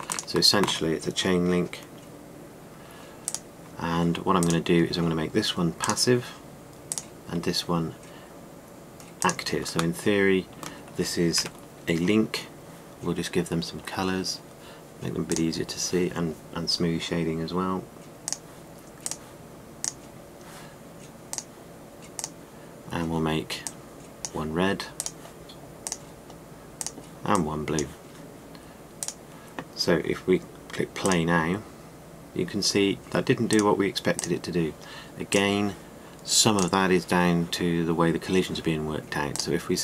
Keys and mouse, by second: 12.0 KP_Decimal, 12.8 middle click, 13.0-13.5 middle drag, 15.9-19.7 drag.